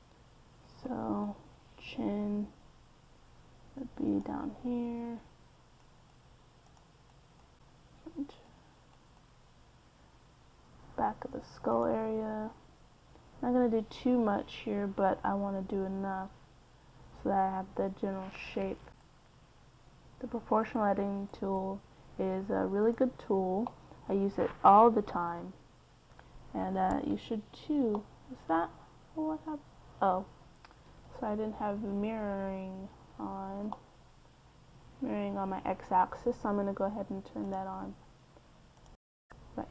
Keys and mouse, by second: 0.5 middle click, 3.9-6.8 right drag, 7.7-9.3 right drag, 19.5-21.0 right drag, 21.7-23.3 right drag, 23.6-25.8 right drag, 26.0 click, 27.7 KP_1, 29.6 KP_1, 30.5 middle click, 32.9-33.4 ctrl+z, 33.7 ctrl+z, 33.9 ctrl+z, 34.1 ctrl+z, 34.3 ctrl+z, 34.6 ctrl+z, 35.3 middle click, 37.9-39.7 drag.